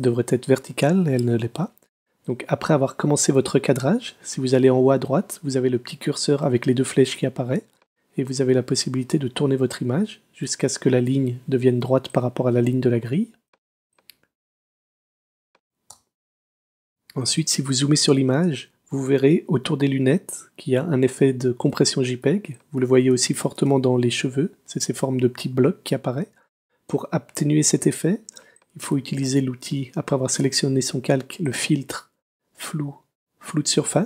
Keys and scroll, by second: 1.3 Escape, 15.9 Return, 17.6 space, 21.8 super+space, 23.1 space, 27.8 space.